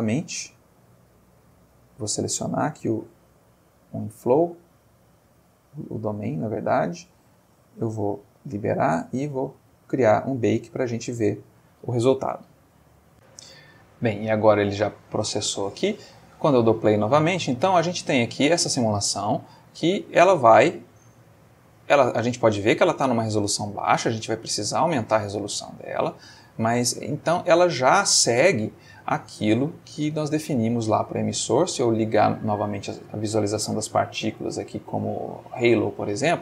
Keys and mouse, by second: 3.3 click, 4.6-5.6 middle drag, 5.8 middle click, 6.7 middle click, 8.3 click, 11.5 click, 13.1 click, 15.3 click, 15.8 space, 18.9 space, 19.6-20.5 ctrl+middle drag, 20.7-22.9 ctrl+middle drag, 23.1-26.8 middle drag, 27.8-30.6 drag, 32.1 click, 32.7 middle click, 33.3 middle click, 33.9 middle click, 34.7 click, 35.5 click.